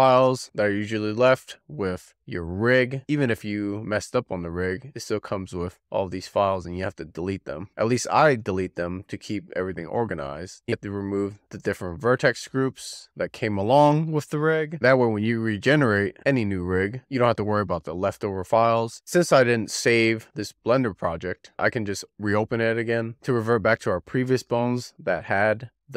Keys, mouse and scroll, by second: 0.1 x, 0.8-1.6 scroll down 3, 1.7 drag, 2.2-4.4 scroll down 26, 4.6 shift+click, 7.2 x, 10.0 click, 11.6 click, 12.2-20.3 drag, 20.7-21.5 scroll down 5, 21.5-24.5 drag.